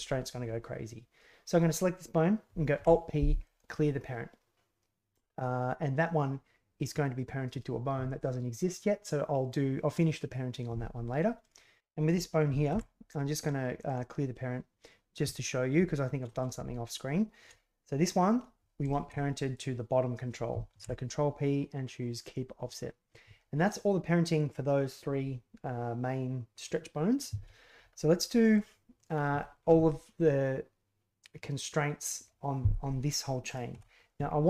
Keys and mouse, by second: 2.7 alt+p, 11.4 right click, 12.6 alt+p, 18.8 shift+click, 20.7 ctrl+p, 28.3 middle click, 28.9 click, 29.3 shift+middle click, 33.4 right click.